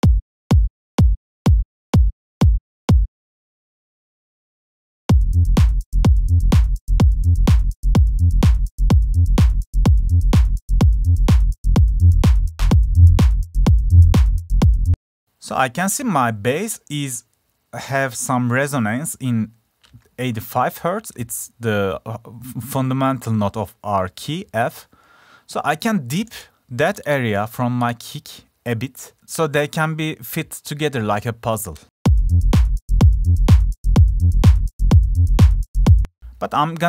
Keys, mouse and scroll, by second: 2.7 click, 2.9 click.